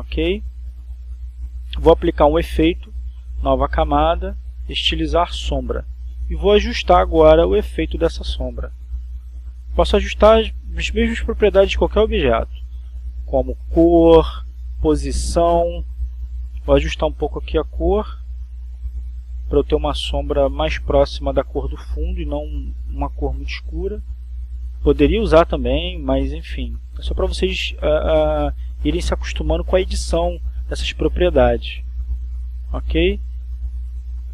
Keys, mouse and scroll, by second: 1.8 click, 4.9 right click, 8.4 click, 10.8-11.9 drag, 12.1 click, 17.0 click, 18.5 click, 19.4 click, 23.0 click, 24.3 click, 25.1 click, 27.5 click, 28.6 click, 30.8 click, 31.8 click, 33.6 click.